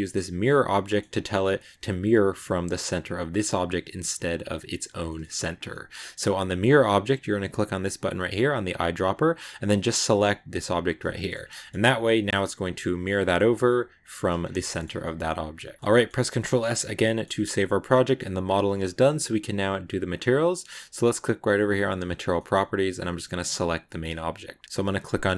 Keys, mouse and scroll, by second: 0.7 shift+scroll up 1, 0.7-1.9 shift+middle drag, 1.9 right click, 3.9 right click, 4.9-8.6 middle drag, 8.6 click, 11.1 shift+middle click, 11.2 scroll down 2, 11.4 middle click, 11.6 Tab, 12.0 scroll up 1, 12.1 a, 12.5 right click, 12.7 g, 14.2 scroll down 2, 14.4 shift+middle click, 14.8 a, 14.9-16.1 middle drag, 16.1 ctrl+s, 16.3-18.3 middle drag, 18.3 scroll up 2, 18.7-21.8 shift+middle drag, 21.8 click, 22.2 middle click, 23.1 right click, 23.7 middle click, 24.6-25.3 drag.